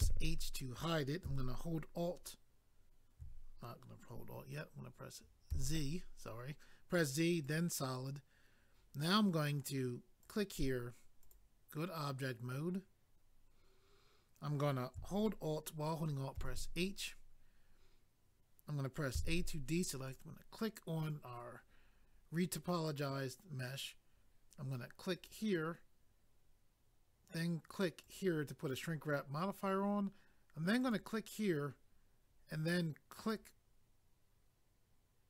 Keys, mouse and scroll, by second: 7.4 click, 7.5 click, 10.2 click, 10.3 click, 11.2 click, 11.3 click, 16.3 alt+h, 20.0 click, 20.0 a, 25.1 click, 28.0 click, 28.1 click, 30.8 click, 30.9 click, 33.2 click, 33.3 click.